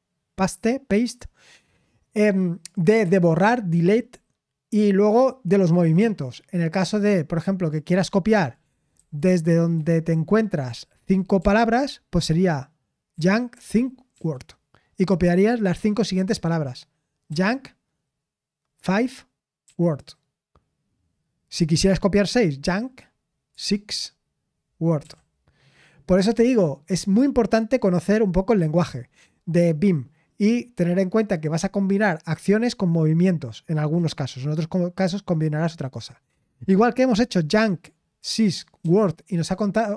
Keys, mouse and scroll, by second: 10.4-11.3 typing, 13.1-14.1 typing, 26.6-27.4 typing.